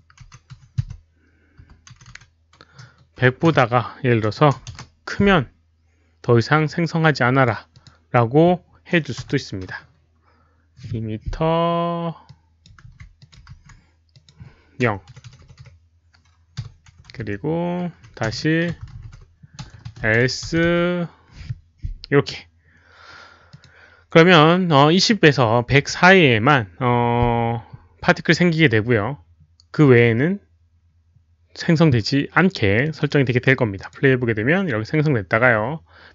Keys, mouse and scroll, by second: 0.5 Delete, 0.8 1, 1.5 KP_0, 2.1 Left, 2.1 Delete, 2.1 Right, 2.1 ctrl+v, 2.1 click, 2.1 KP_0, 2.1 1, 4.3 BackSpace, 4.6 Left, 4.6 Delete, 4.6 Right, 4.6 click, 4.6 1, 6.6 click, 9.1 Left, 9.1 Delete, 9.1 Right, 9.1 KP_0, 9.1 1, 9.2 Return, 11.1 Delete, 11.1 KP_0, 11.1 1, 11.5 middle click, 11.5-12.2 scroll down 1, 12.3 click, 12.8 ctrl+c, 13.2 click, 14.1 click, 15.1 Delete, 16.6 0, 16.9 Right, 17.9 Left, 17.9 Right, 17.9 Delete, 17.9 ctrl+v, 17.9 ctrl+c, 17.9 click, 17.9-19.6 typing, 18.2 Return, 22.6 middle click, 23.5 click, 28.9 click, 29.1 middle click, 29.7 middle click, 29.7-30.0 scroll down 1, 29.7-30.8 typing, 30.3 middle click, 30.3 click, 30.3-30.6 scroll up 1, 30.8 scroll down 1, 32.9 click, 33.7 click.